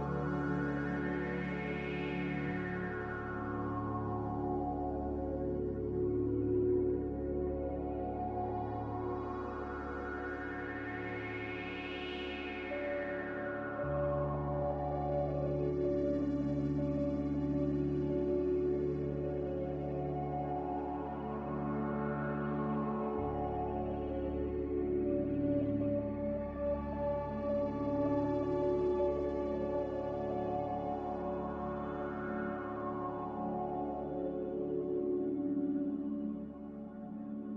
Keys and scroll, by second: 2.4 z, 12.3 z, 26.1 3, 26.2 0, 26.3 Return, 33.0 a, 37.1 x.